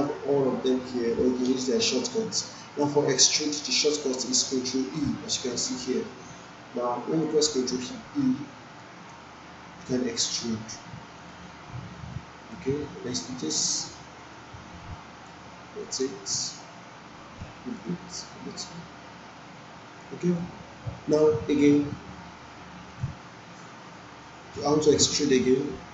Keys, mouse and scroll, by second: 3.7 click, 7.2 click, 8.8 ctrl+e, 11.2 click, 12.6-15.4 drag.